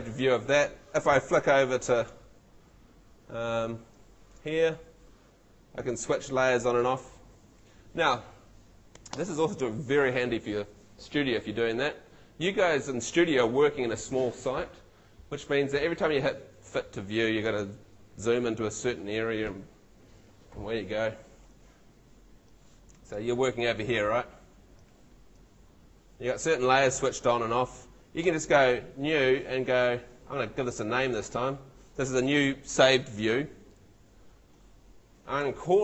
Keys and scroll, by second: 2.1 shift+F2.